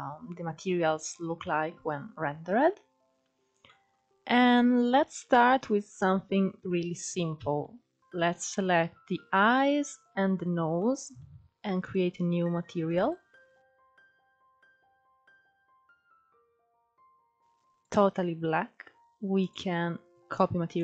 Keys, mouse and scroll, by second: 1.2-1.5 scroll up 5, 1.4 middle click, 2.2 scroll down 4, 2.7-3.0 scroll down 1, 3.2 shift+scroll down 1, 3.5-5.0 shift+middle drag, 5.0 click, 5.6-6.5 scroll up 4, 6.5 click, 7.1 scroll down 1, 7.2-10.0 middle drag, 10.0 shift+click, 10.4-11.4 middle drag, 11.4 click, 12.6 click, 15.7 click, 19.0 click.